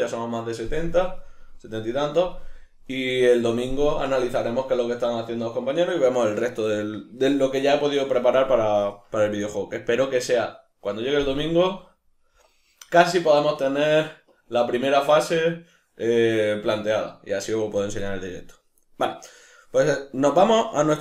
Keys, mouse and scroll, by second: 9.3-10.1 middle drag, 13.2 middle click, 20.3 middle click.